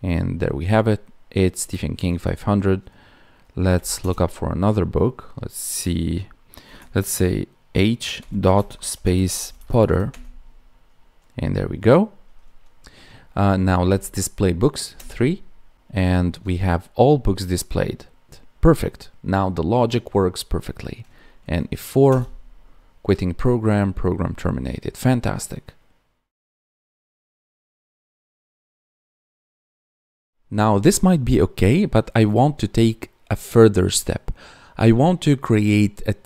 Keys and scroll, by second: 8.5 space.